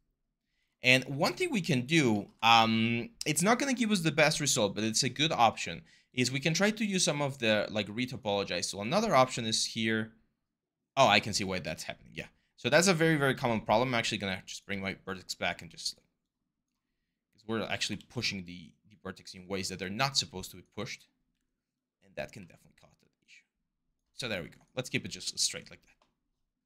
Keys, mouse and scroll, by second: 14.5 r, 17.8 ctrl+z, 22.2 w.